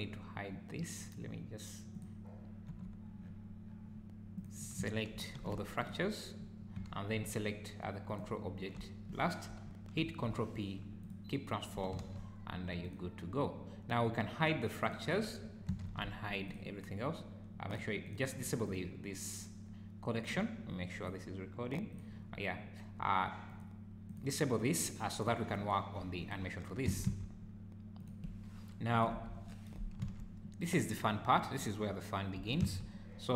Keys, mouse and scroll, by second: 1.9 click, 2.7 h, 3.2-3.7 scroll up 6, 3.7-4.2 scroll down 4, 4.4 click, 5.3 shift+g, 8.1 shift+click, 10.0 ctrl+p, 12.0 alt+a, 12.8 click, 14.8 click, 15.8 alt+h, 16.4 click, 17.7 click, 18.0 click, 18.4 click, 18.6 click, 23.5 click, 24.1 click, 25.1 click, 25.5-26.0 scroll down 5, 26.2 click, 26.8 s, 28.9 click, 29.1 KP_1, 30.0 z, 31.5 click, 32.3 g.